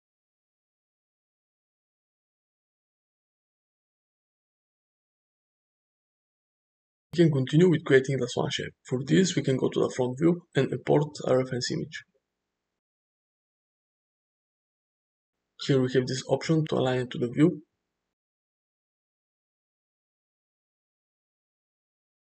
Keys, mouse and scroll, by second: 2.9 click, 10.8 shift+a, 20.9 g.